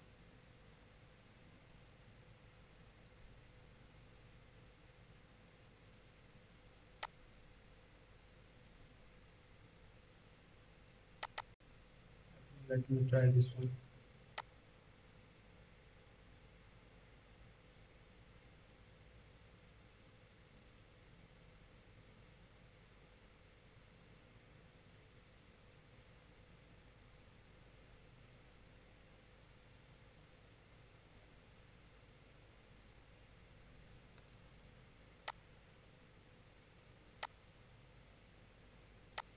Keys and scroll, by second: 15.0 ctrl+z, 19.2 space, 34.1 space.